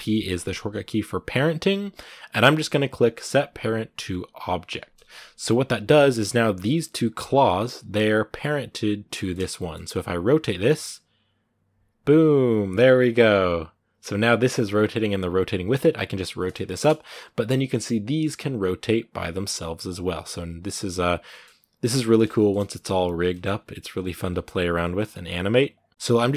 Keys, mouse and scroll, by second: 4.9-5.5 scroll down 1, 5.5-7.0 right drag, 8.9-9.9 shift+middle drag, 9.9 typing, 16.4 shift+middle click, 17.2 right click, 17.6 typing, 18.7 right click, 18.9 typing, 20.1 right click, 20.2 typing, 20.9 right click, 21.1 scroll down 1, 21.1 middle click, 21.4 typing, 22.2 shift+middle click, 22.5 r, 23.1 middle click, 23.4 r, 24.1 right click, 24.2 r, 25.2 right click, 25.2 r, 25.7 middle click, 25.9 ctrl+z.